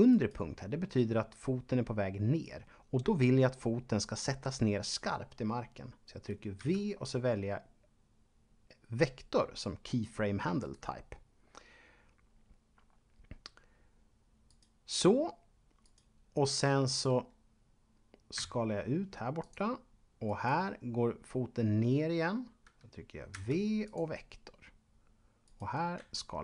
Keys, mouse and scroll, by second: 0.1 right click, 6.6 v, 10.6 click, 14.5 right click, 15.7 right click, 18.4 s, 19.4 click, 20.2 right click, 23.2 v, 23.7 click, 25.4 right click, 26.0 s.